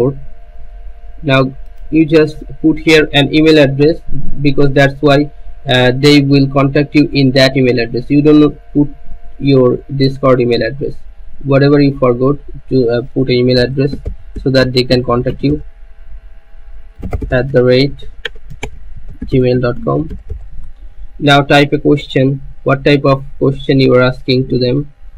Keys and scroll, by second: 13.3-21.8 typing.